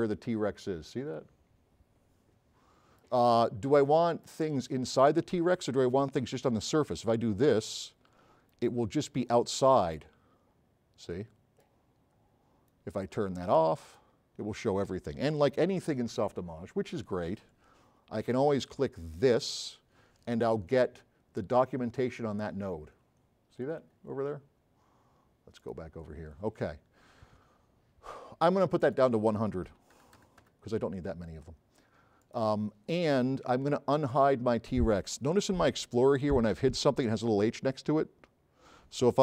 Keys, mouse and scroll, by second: 2.0-3.1 right drag, 3.4 middle click, 3.4 scroll up 1, 3.8 right click, 4.6 scroll up 1, 5.7 scroll down 1, 7.7 click, 8.5 a, 8.6 right click, 9.3 middle click, 9.7 middle click, 10.0 right drag, 10.0 s, 12.0 middle click, 12.1 middle click, 12.8 right click, 13.9 click, 19.3 click, 21.2 middle click, 21.9 scroll down 2, 22.5-23.2 scroll up 6, 23.0 middle click, 23.2-23.8 scroll down 4, 23.9-24.4 scroll up 4, 28.9 click, 29.8 KP_1, 30.0 KP_0, 30.6 KP_Enter, 32.3 click.